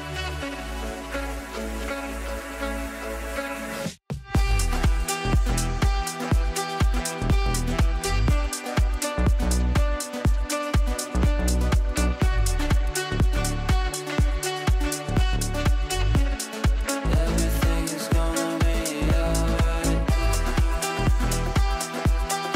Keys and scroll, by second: 1.2 ctrl+q.